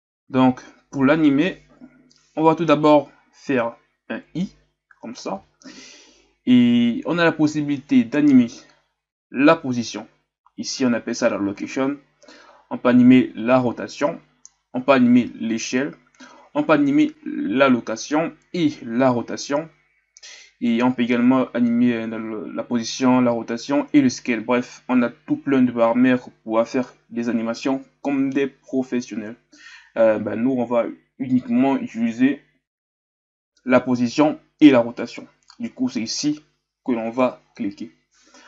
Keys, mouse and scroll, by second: 0.4 shift+scroll up 1, 38.0-38.4 scroll down 4.